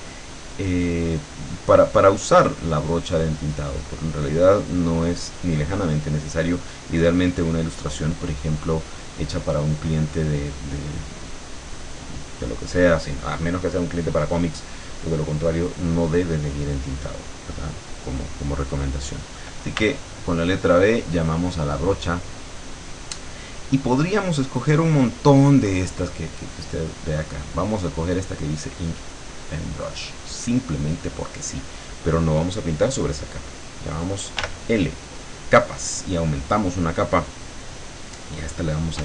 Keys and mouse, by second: 0.0-1.5 drag, 19.8 b, 21.7 click, 29.1 click, 34.4 l, 36.5 click, 37.6 click, 38.8-39.0 typing.